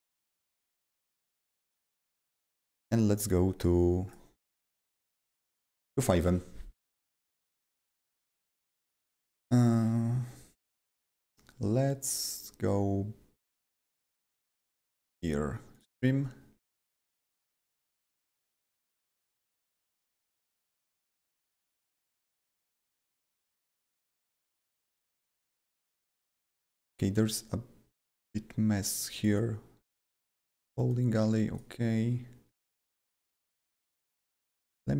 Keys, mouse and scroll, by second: 0.0 click, 1.2 click, 1.4 click, 1.9 click, 2.9-13.5 click, 15.8 click, 17.5 click, 22.3 click, 22.4 double click, 22.9 click, 23.1 double click, 23.7 click, 23.8 double click, 26.8 click, 29.1 click, 29.2 double click, 31.5 click, 34.1 click, 34.3 double click.